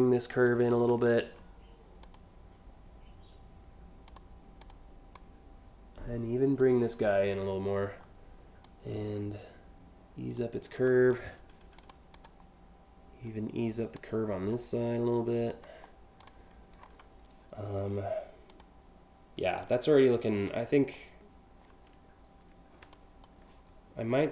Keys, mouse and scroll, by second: 1.7 click, 3.7 click, 4.2 click, 4.8-6.2 drag, 8.3-10.0 drag, 10.4 click, 11.4 click, 11.8 click, 13.6-15.3 drag, 15.9 click, 18.1 click, 19.2 click, 20.1-20.6 drag, 22.5-22.9 shift+drag.